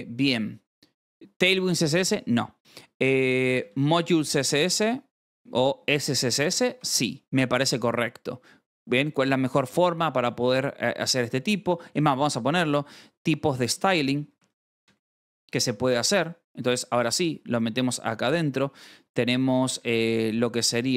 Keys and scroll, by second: 2.7-7.0 typing, 6.7 ctrl+s, 11.2-18.8 typing, 15.6 ctrl+s, 18.0 Escape, 20.8 shift+>.